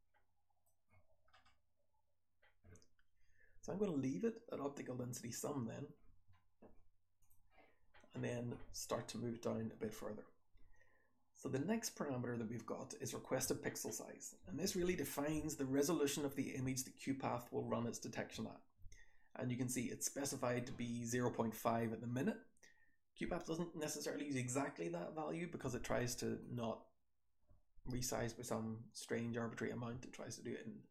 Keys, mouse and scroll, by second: 0.5-1.4 scroll down 1, 1.4-6.2 scroll up 1, 6.2-7.2 scroll up 1, 26.3 click.